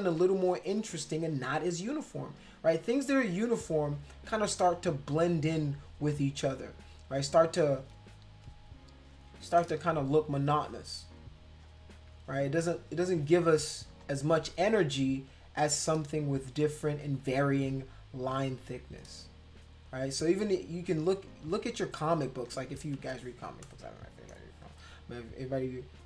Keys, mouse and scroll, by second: 0.3 space, 0.4 click, 1.3 click, 1.8 click, 2.5 click, 2.8 click, 3.6 click, 4.0 click, 4.3 click, 4.6 click, 5.5 space, 6.1 click, 7.1 click, 7.8 click, 9.1 shift+click, 10.4 click, 11.6 shift+click, 13.1 click, 13.9 click, 15.3 shift+click, 17.2 click, 18.4 shift+click, 19.9 click, 21.2 shift+click, 22.3 click, 23.1 space, 23.1 click, 23.6 click, 25.9 click.